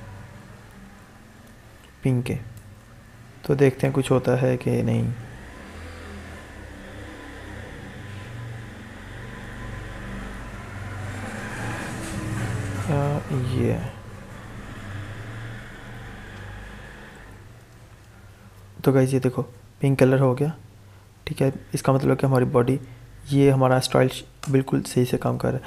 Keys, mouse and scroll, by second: 0.2-3.0 typing, 3.4 ctrl+s, 3.9 alt+Tab, 7.8 click, 8.1 alt+Tab, 8.8 alt+Tab, 13.3 alt+click, 20.1 alt+Tab, 23.2 click, 24.3 Return.